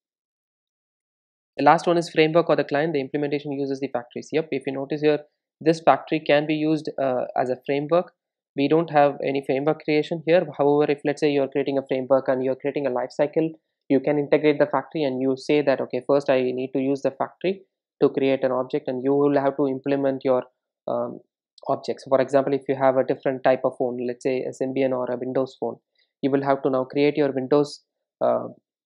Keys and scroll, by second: 10.6 ctrl+shift+super+F12.